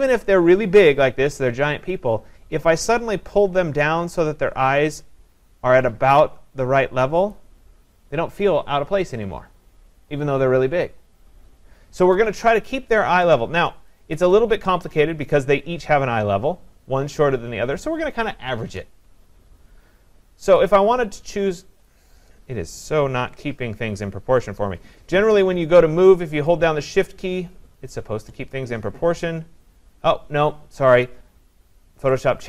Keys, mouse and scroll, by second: 1.0-6.1 drag, 7.3-12.4 drag, 14.6-16.8 drag, 21.8 click, 23.3 ctrl+z, 32.2 click.